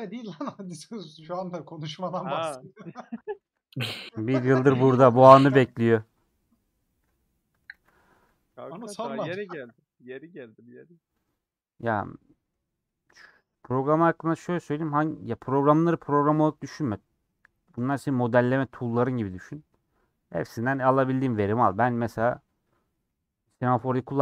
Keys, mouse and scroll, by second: 0.9 shift+x, 1.4-2.5 shift+middle drag, 2.7 shift+click, 3.5 shift+x, 3.7 scroll down 1, 3.9-4.3 scroll up 1, 4.6-5.5 scroll down 3, 5.5 a, 6.6 scroll down 2, 6.8 middle click, 7.4-8.0 scroll down 3, 7.7 alt+z, 8.4 Tab, 8.4-9.6 middle drag, 9.6 Tab, 9.9-11.3 middle drag, 11.3 scroll down 1, 11.6 middle click, 12.1-12.4 scroll up 2, 12.8-14.6 middle drag, 14.6 2, 17.1 click, 17.9 a, 18.5-21.6 middle drag, 21.6 /, 22.6 middle click, 22.8 scroll up 2, 23.7 KP_Decimal.